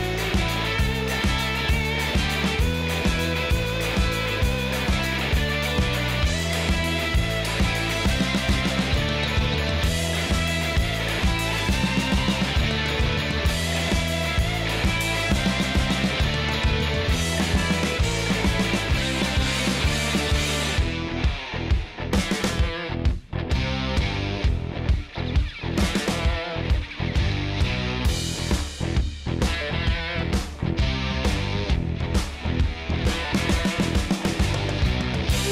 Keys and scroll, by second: 0.9 space, 2.8 space, 14.5 space, 16.6 space, 19.7 i, 22.2 typing, 23.3 space, 26.4 space.